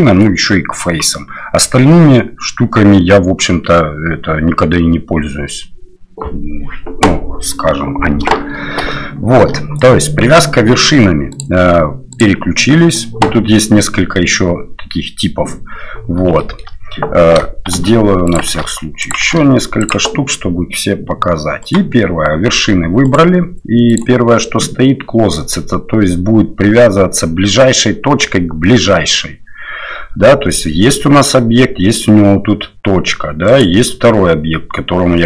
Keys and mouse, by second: 8.9-9.4 shift+middle drag, 11.5-15.8 drag, 16.4 shift+middle click, 17.7 shift+d, 18.5 shift+d, 19.3 shift+d, 21.6 click, 23.1 right click, 23.9-25.4 right drag, 33.5 right click.